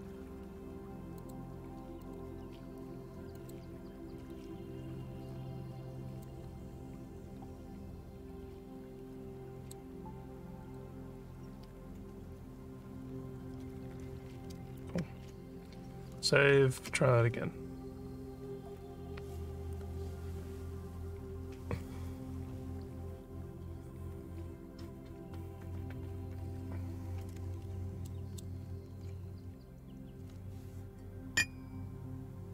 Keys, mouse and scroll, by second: 1.1 click, 2.0 click, 3.3 click, 4.5 scroll down 3, 6.2-9.7 drag, 9.9 scroll down 1, 10.6 click, 13.3-13.7 scroll up 3, 14.3 scroll up 3, 15.2 ctrl+s, 28.0 alt+middle click, 28.6 alt+scroll up 1.